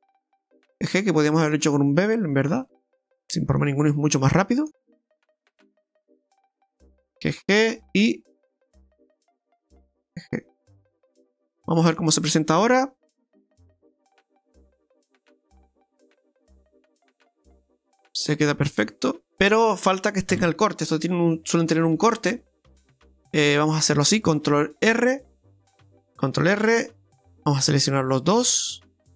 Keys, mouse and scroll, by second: 0.0 alt+shift+right click, 0.8 g, 3.0 middle click, 4.2 right click, 4.5 alt+shift+right click, 4.7 right click, 5.9 g, 7.5 middle click, 8.5 alt+shift+right click, 8.8 alt+shift+right click, 9.1 alt+shift+right click, 10.0 g, 11.1 scroll down 2, 11.3 middle click, 14.0-14.5 scroll down 4, 14.5 middle click, 15.7 Tab, 16.4 right click, 16.7 middle click, 19.3 middle click, 19.3 scroll down 2, 19.4 right click, 21.0 KP_Divide, 21.6 Tab, 22.1 middle click, 23.2-24.4 scroll up 4, 24.8 ctrl+r, 26.4 ctrl+r, 28.8 alt+shift+right click.